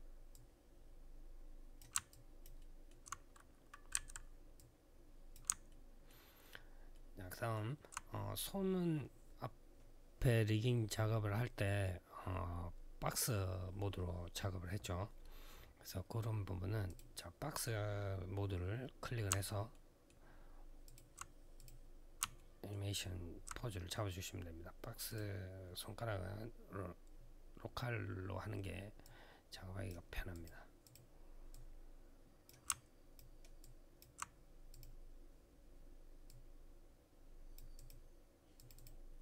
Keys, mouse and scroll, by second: 0.1 click, 1.9 alt+click, 2.3 alt+middle click, 2.8-3.7 scroll up 3, 3.7 e, 4.3 click, 5.4 alt+middle click, 5.9 alt+scroll up 1, 6.7 alt+middle click, 16.6 click, 19.5 alt+middle click, 20.0-20.4 alt+scroll up 1, 20.6 alt+click, 21.3 click, 22.1 alt+middle click, 22.7 alt+scroll down 1, 24.8 click, 28.8 click, 30.1 click, 30.6 click, 30.7 double click, 31.3 double click, 32.4 click, 33.4 alt+click, 34.5 click, 36.1 click, 37.5 click, 37.6 click, 38.3 click, 38.4 click, 38.5 click.